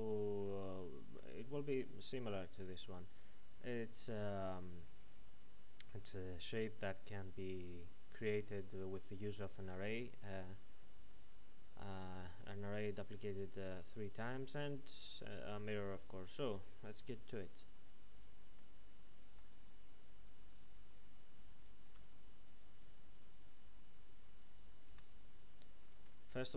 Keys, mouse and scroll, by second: 18.6 middle click, 21.5 ctrl+n, 22.2 click, 25.8 click, 26.0 shift+a.